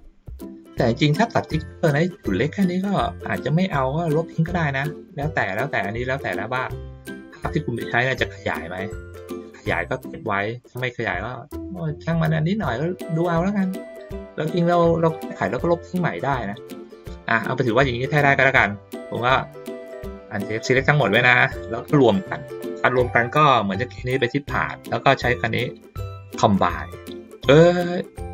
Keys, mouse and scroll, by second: 0.9 ctrl+shift+middle click, 1.3 ctrl+shift+middle click, 1.7 ctrl+middle click, 2.3 ctrl+middle click, 3.6-4.7 ctrl+middle drag, 5.9 ctrl+middle click, 8.6-10.6 ctrl+middle drag, 11.0 ctrl+middle click, 12.7-13.8 middle drag, 19.2 ctrl+middle click, 19.7 click, 20.5 click, 24.2 click.